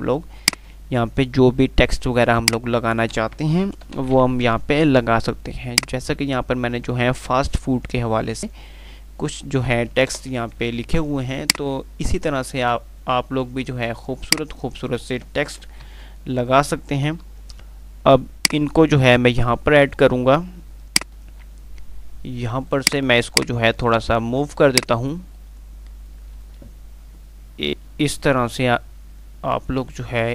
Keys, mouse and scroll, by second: 0.6-2.4 drag, 3.8 g, 4.0 Delete, 4.8 z, 5.9-9.2 drag, 10.4 Page_Up, 11.8-13.1 drag, 14.5 right click, 15.9 g, 16.1 F3, 18.7-19.7 drag, 20.5 F2, 21.2 click, 21.6-21.9 F2, 23.1-26.0 drag, 28.5 ctrl+r, 29.9 ctrl+r.